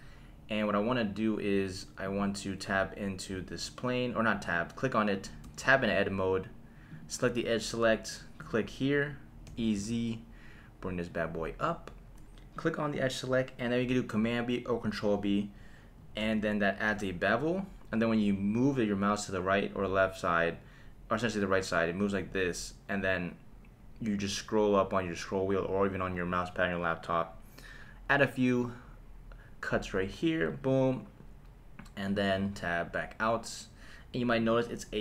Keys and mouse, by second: 2.0 click, 5.4 Tab, 6.9 click, 8.4 click, 9.5 e, 9.7 z, 11.6 click, 12.6 click, 16.2 super+b, 30.5 click, 32.4 Tab, 34.4 click.